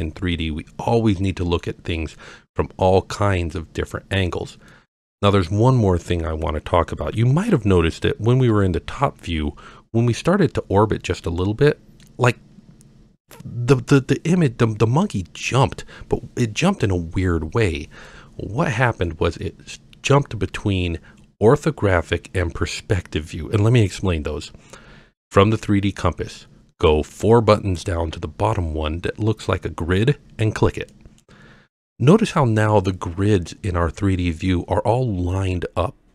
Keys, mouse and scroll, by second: 0.4-1.6 middle drag, 2.1-3.9 middle drag, 4.7-5.1 middle drag, 8.5 KP_7, 11.4 middle click, 18.1-19.1 middle drag, 19.6-20.1 scroll up 1, 30.9 click.